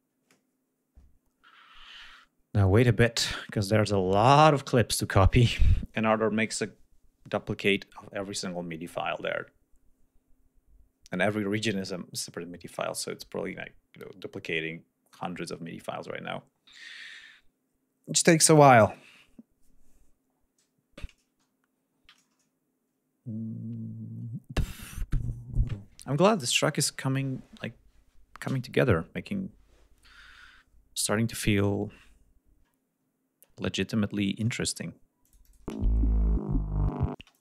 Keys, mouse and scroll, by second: 33.1 ctrl+scroll down 2, 33.5-34.0 ctrl+scroll up 3, 34.3 scroll down 2, 35.1-35.6 drag, 35.5 space, 37.1 space, 37.2 click.